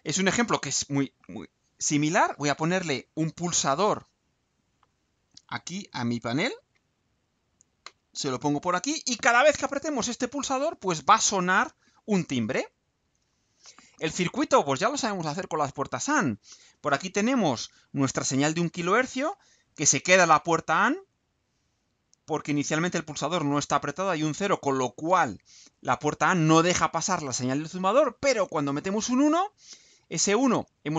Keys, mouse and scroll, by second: 12.6 ctrl+u.